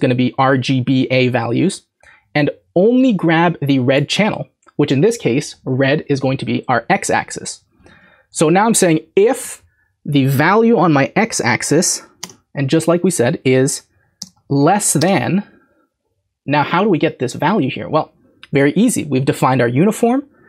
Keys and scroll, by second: 7.8 Right, 7.9 Right, 8.3 Left, 14.2 typing.